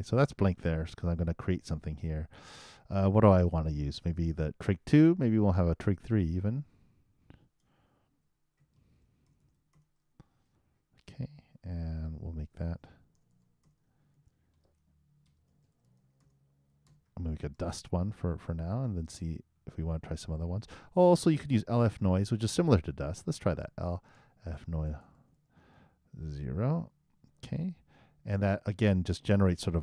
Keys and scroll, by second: 15.7 shift+d, 17.1-18.0 typing, 23.6 shift+l, 24.5 shift+n, 24.8 shift+o.